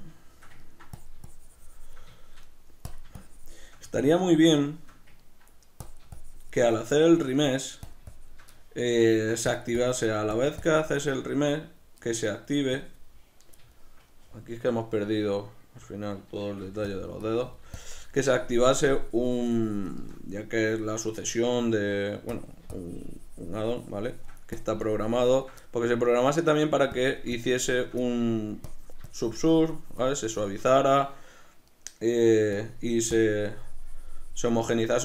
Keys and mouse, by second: 0.1-1.1 shift+middle drag, 1.1-2.3 shift+drag, 2.3 shift+middle click, 3.0-4.1 shift+drag, 4.1-5.9 shift+middle drag, 5.9-7.5 drag, 7.5 middle click, 8.0 shift+click, 8.7 shift+middle click, 9.6-12.1 shift+drag, 12.1 middle click, 12.8 click, 13.8-17.0 shift+middle drag, 16.7 f, 17.3-21.3 drag, 21.3-22.4 shift+middle drag, 22.4-25.7 drag, 25.7-27.1 middle drag, 27.1-28.1 drag, 28.1 middle click, 28.8-31.8 drag, 31.8 middle click, 32.7-34.8 drag, 34.8-35.0 middle drag.